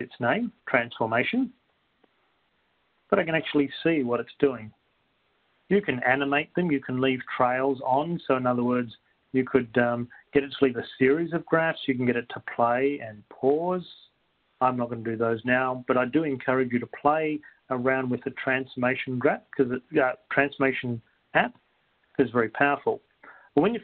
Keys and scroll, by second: 8.3 Up, 12.3 Down, 13.9 Right, 18.3 Right, 18.3 Return, 22.9 Up, 22.9 Return.